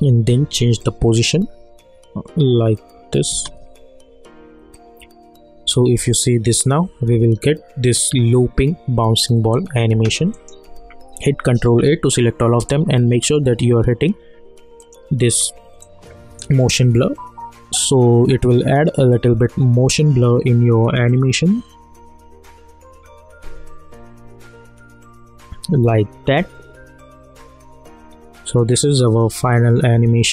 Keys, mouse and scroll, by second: 0.0 p, 0.8-3.3 drag, 3.3 space, 9.9 space, 10.3 click, 11.7 ctrl+a, 13.2 click, 13.4 click, 16.5 space, 30.1 space.